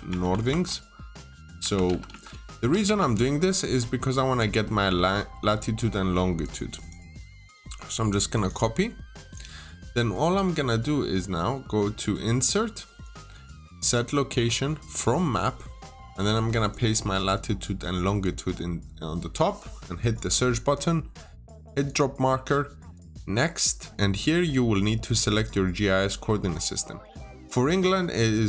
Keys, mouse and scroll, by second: 0.0-3.2 typing, 3.8 click, 5.1-6.3 scroll down 1, 6.3 click, 6.6 right click, 8.2 click, 8.3-9.6 typing, 9.1 click, 16.5 right click, 18.1 click.